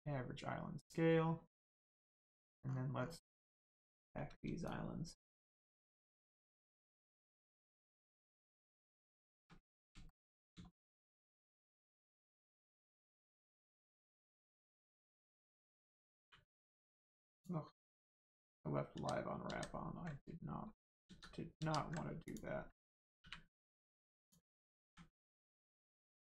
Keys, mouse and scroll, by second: 2.1 click, 3.0 scroll up 1, 4.7 shift+click, 9.7 scroll down 1, 10.1 shift+middle click, 11.1 scroll up 1, 11.6 shift+middle click, 12.1 scroll up 1, 12.5 click, 16.2 u, 17.3 click, 18.2 scroll down 1, 18.9 ctrl+z, 19.5 ctrl+z, 21.6 z, 22.3 click, 23.2 u, 24.2 click, 24.8 a, 25.9 shift+middle click.